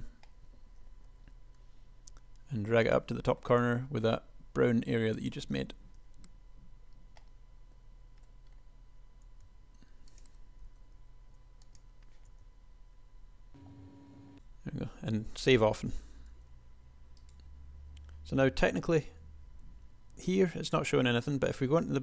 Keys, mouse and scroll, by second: 1.4 g, 3.8 s, 9.5 s, 10.7 g, 12.5 Tab, 16.6 g, 21.3 p.